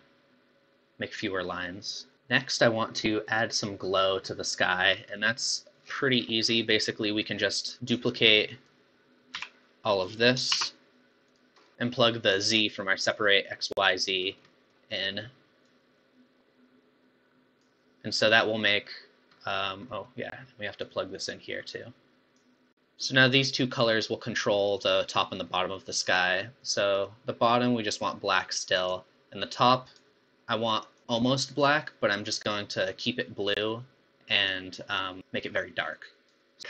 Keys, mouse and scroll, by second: 2.9-3.3 middle drag, 3.3-4.2 scroll down 1, 4.2-4.8 middle drag, 4.8 scroll down 5, 5.2 middle click, 5.9-6.8 scroll down 17, 6.8-7.3 middle drag, 7.3-7.7 scroll up 4, 8.1 click, 9.5 g, 10.7 shift+d, 12.4 middle click, 12.7 scroll down 1, 13.8 middle click, 14.3 scroll down 3, 14.5-15.6 middle drag, 15.6 click, 19.4-20.8 middle drag, 20.8 click, 22.9-24.5 middle drag, 27.0 click, 29.8 click.